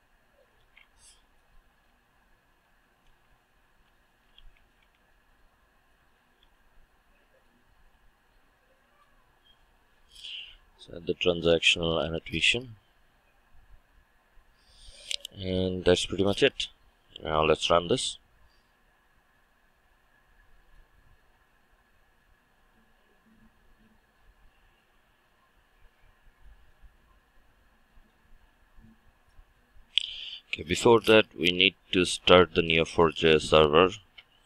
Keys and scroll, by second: 0.6 ctrl+shift+KP_Add, 10.7 Return, 18.6 shift+F9.